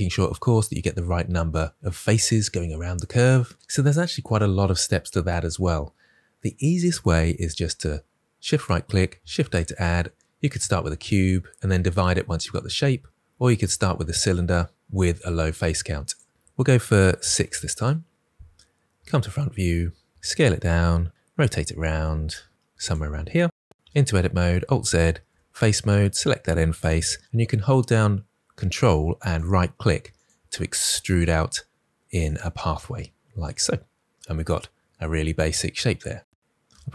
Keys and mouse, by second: 8.4 right click, 9.2 shift+a, 16.0-17.3 drag, 18.3 KP_1, 21.0 s, 21.9 r, 22.8 s, 23.7 Tab, 23.7 z, 24.4 alt+z, 25.2 3, 25.8 click, 29.2 right click, 31.0 right click, 32.0 right click, 34.1 right click, 36.6 alt+z.